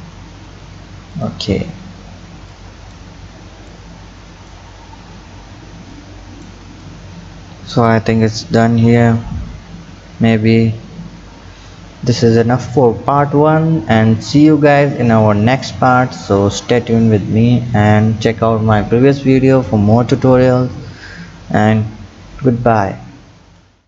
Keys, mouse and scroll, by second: 0.2-1.1 scroll down 4, 1.1 click, 2.5-3.7 drag, 5.1-6.0 scroll up 2, 6.0 click, 13.8-15.2 scroll down 2, 15.2 click, 16.3-19.3 drag.